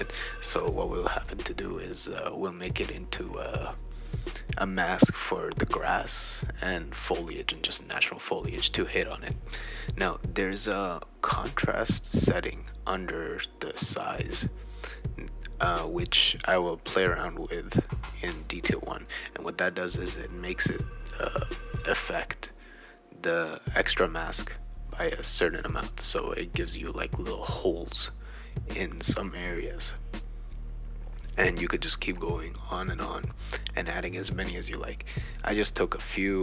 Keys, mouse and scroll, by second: 3.9 click, 4.6 click, 4.9 click, 5.6 click, 6.1 click, 6.7-8.4 drag, 8.6 click, 8.8 click, 9.5-10.7 drag, 10.7-11.7 typing, 10.7 right click, 12.0 click, 13.6-15.7 typing, 14.6-15.6 shift+right drag, 17.0 click, 19.0 click, 19.8 BackSpace, 20.6 right click, 21.5-24.6 typing, 22.0 click, 23.5-24.7 shift+right drag, 26.4 click, 26.9 click, 27.3-28.6 right drag, 28.6 click, 28.9 click, 30.1 click, 30.4 right click, 31.3 click, 32.5 click, 33.0 click, 33.5 click, 34.0 click, 34.3 click, 34.7-36.4 drag.